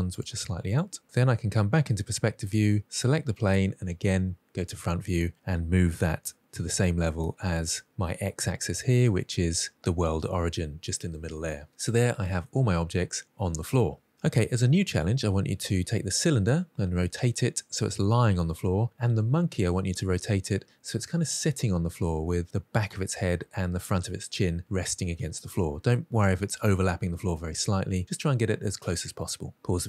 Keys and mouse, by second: 1.1-1.9 middle drag, 2.9 click, 4.7 KP_1, 5.8 g, 9.2 click, 11.2-11.6 middle drag, 12.3 middle click.